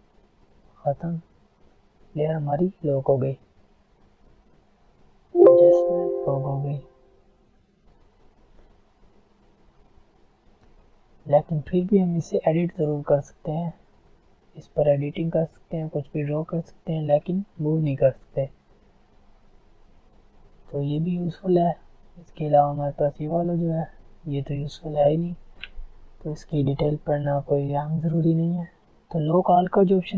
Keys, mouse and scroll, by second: 0.3 alt+scroll up 1, 0.6-1.0 alt+scroll down 1, 1.1-2.9 drag, 2.9 alt+scroll down 1, 3.3 alt+scroll up 1, 4.4 click, 6.9 alt+scroll down 1, 7.1 scroll up 2, 8.0 click, 10.3 alt+scroll down 2, 10.6 alt+scroll up 1, 10.9-12.3 alt+right drag, 12.3 click, 13.1 ctrl+z, 14.3-16.8 drag, 16.8 ctrl+alt+scroll down 1, 17.0 ctrl+alt+z, 18.0 alt+scroll up 1, 18.7 alt+scroll down 1, 19.3 alt+scroll up 1, 20.1 click, 20.6 alt+scroll down 1, 20.8 alt+scroll up 1, 28.8 click.